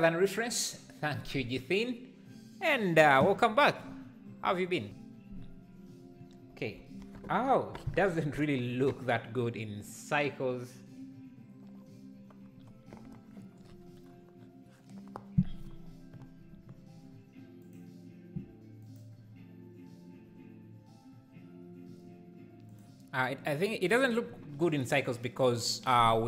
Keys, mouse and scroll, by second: 18.9 click.